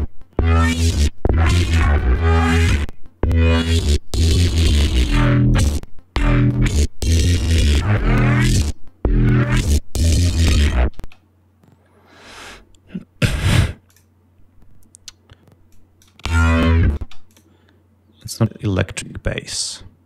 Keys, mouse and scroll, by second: 5.1 click, 10.6 space, 12.9 scroll up 2, 13.4 click, 15.2 click, 15.5 space, 16.4 space, 16.7 click, 17.6 click.